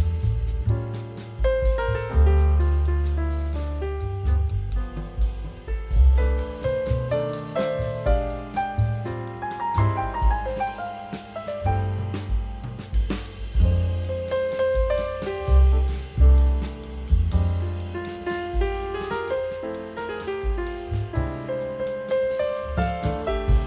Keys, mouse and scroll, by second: 0.3 double click, 9.7 scroll up 1, 10.3 scroll down 1, 13.8 scroll down 1, 16.9 double click, 19.5 scroll up 1, 22.3 scroll up 1.